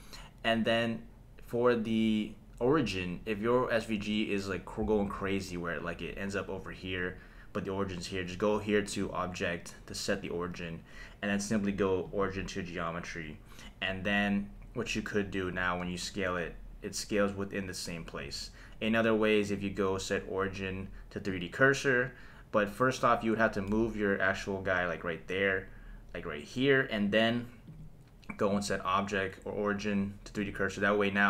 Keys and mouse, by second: 9.0-12.2 drag, 15.8 s, 18.2 Escape, 19.4-21.4 drag, 23.7 g, 27.7 click, 28.5-30.5 drag.